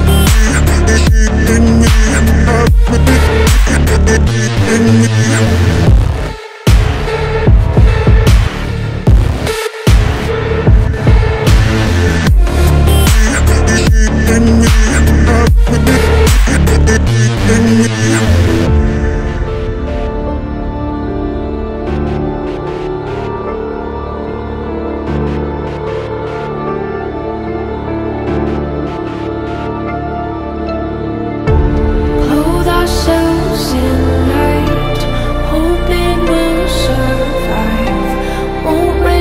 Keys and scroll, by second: 0.8 Delete, 7.5 Delete, 18.0 shift+F2, 18.0 F3, 19.9 Escape, 24.6 c, 26.7 Escape, 27.1 Delete, 30.1 Delete, 31.1 F3, 31.6 Escape, 31.7 F3, 32.0 Escape, 32.5 shift+F2, 32.6 Escape, 32.9 F3, 35.7-36.9 typing.